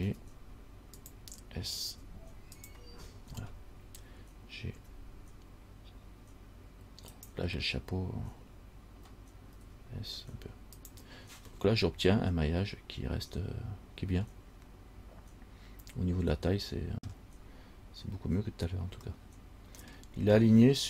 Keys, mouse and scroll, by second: 0.3 g, 2.1 s, 3.2-3.8 scroll up 8, 5.0 g, 9.8 s, 11.8 middle click, 17.9-19.2 scroll up 2, 19.3 middle click.